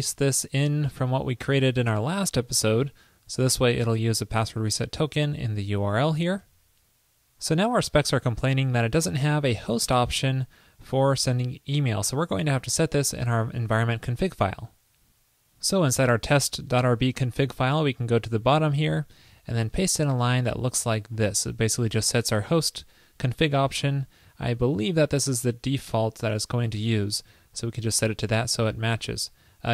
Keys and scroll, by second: 0.8 super+v, 6.5 super+s, 19.9 super+v.